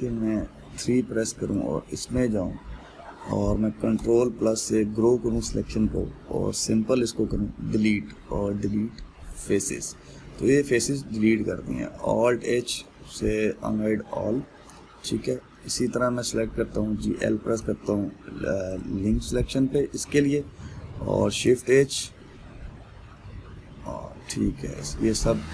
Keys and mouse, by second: 1.7 3, 2.1 click, 4.7 ctrl+KP_Add, 10.2 Delete, 11.0-13.0 middle drag, 13.0 alt+h, 13.9-18.2 ctrl+middle drag, 18.2 l, 20.6 l, 21.9 shift+h, 22.6-25.5 middle drag.